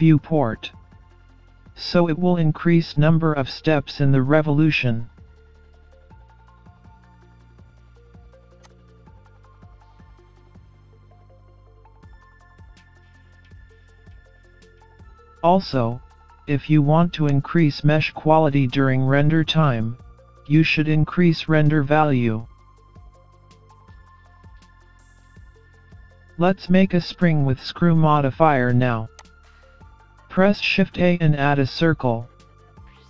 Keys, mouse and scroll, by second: 8.6 click, 9.9 scroll down 4, 10.0 scroll up 4, 10.2 middle click, 11.4 scroll down 1, 11.6 middle click, 11.6 scroll up 1, 17.3 click, 20.8 middle click, 21.8-22.3 scroll down 4, 22.4 middle click, 26.1 Delete, 27.7 shift+a, 30.4 middle click.